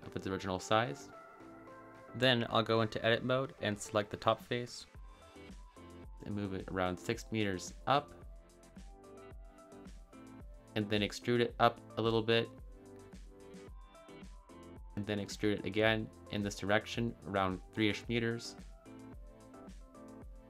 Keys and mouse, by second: 1.0 Return, 3.3-5.6 drag, 6.1 g, 6.3 z, 9.0 click, 10.1 e, 13.5 click, 14.6 click, 15.2 e, 18.7 click.